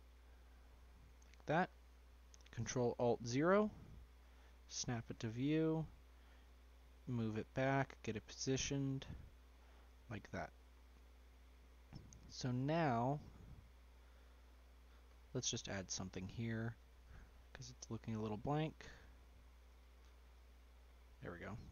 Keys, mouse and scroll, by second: 1.5-3.0 scroll up 1, 3.0 ctrl+alt+KP_0, 4.2-5.5 scroll down 1, 5.5 g, 7.6 g, 9.6-10.7 scroll up 2, 10.7-11.9 scroll up 1, 11.9-12.6 middle drag, 12.6-13.0 scroll up 4, 13.0-13.7 shift+middle drag, 13.7 scroll up 1, 14.6 click, 15.1-15.6 scroll up 5, 15.6-16.3 shift+middle drag, 16.3-18.2 shift+scroll up 1, 18.2 d, 21.6 s.